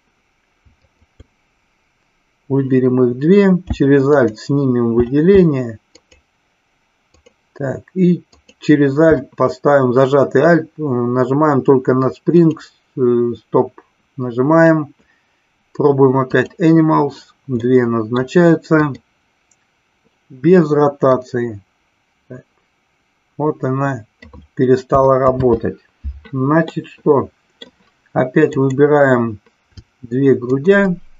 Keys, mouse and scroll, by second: 0.8 shift+click, 7.2 alt+click, 8.3 alt+click, 12.3 click, 16.4 click, 17.6-18.2 middle drag, 18.7-20.2 drag, 21.1-24.3 drag, 25.2 ctrl+z, 26.7-27.6 middle drag, 28.6-30.1 drag, 30.6 shift+click.